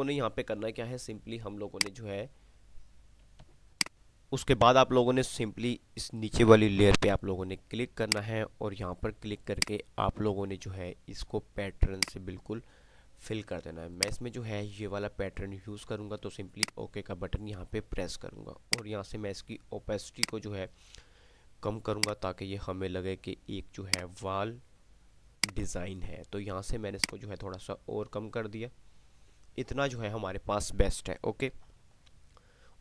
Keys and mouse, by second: 1.9 click, 3.4 click, 8.4 click, 12.2 click, 16.9-19.7 drag.